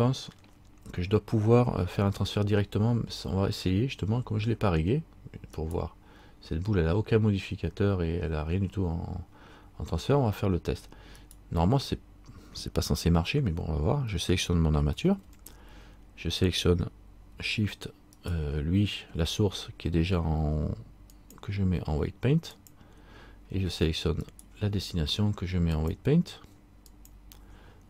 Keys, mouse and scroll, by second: 5.7 right click, 11.4 right click, 18.3 shift+right click, 21.3 shift+click, 24.4 shift+right click, 25.9 shift+click.